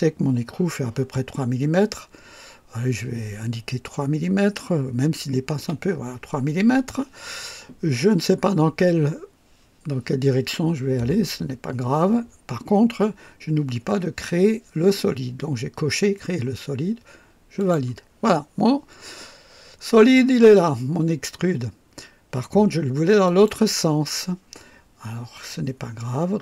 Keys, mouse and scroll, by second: 5.6 KP_3, 17.6 click, 23.3 click.